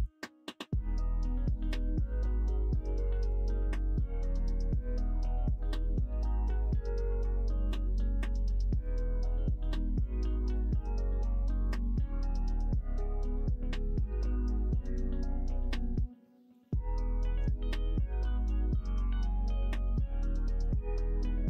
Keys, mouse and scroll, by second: 0.8 click, 1.5 click, 2.4 click, 3.4 middle click, 4.4 middle click, 4.8 middle click, 6.1 click, 7.0-8.3 drag, 8.5 middle click, 9.2 middle click, 9.6 2, 10.0 click, 10.2 middle click, 11.0 click, 12.3 click, 13.2 click, 14.5 click, 15.6-16.6 drag, 16.7 middle click, 17.7 2, 18.1 click, 18.6 shift+click, 19.2 click, 19.6 middle click, 20.3 shift+click, 20.6 middle click.